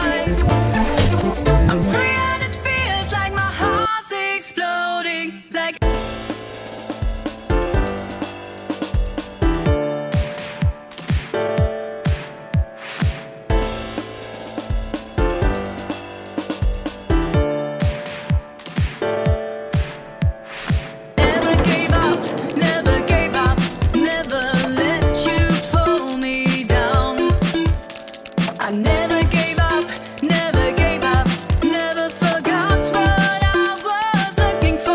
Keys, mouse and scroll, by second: 4.0 click, 4.2 click, 9.6 Print, 11.0 right click, 11.8-12.2 scroll down 1, 12.6 scroll down 1, 13.3 click, 15.0 click, 16.8 click, 18.2 click, 18.7 click, 20.6-21.2 Right, 22.5-22.9 Right, 23.3-25.4 typing, 26.6 click, 28.5 drag, 29.9-30.7 drag, 32.6-34.0 drag.